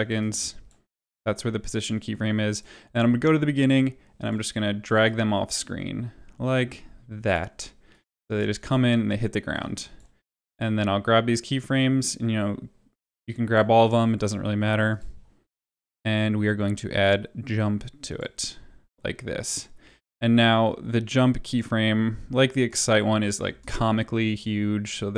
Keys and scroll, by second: 8.2 space, 23.4 space.